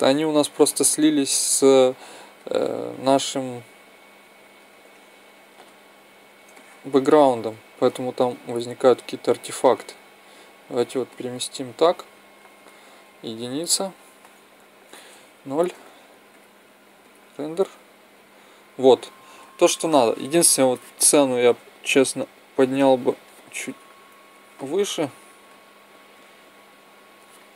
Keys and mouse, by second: 0.9-2.9 drag, 3.0 middle click, 6.2 middle click, 8.1-9.7 drag, 11.0-13.0 middle drag, 13.0 KP_1, 15.2 KP_0, 16.3-17.4 drag, 21.4-21.8 Up, 22.1-23.1 Up, 23.8 Escape, 25.1-26.5 drag.